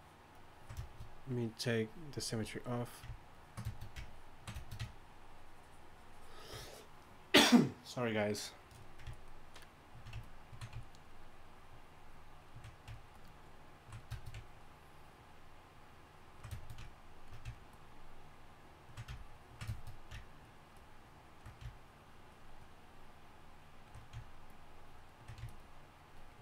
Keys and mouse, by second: 21.5-26.4 drag.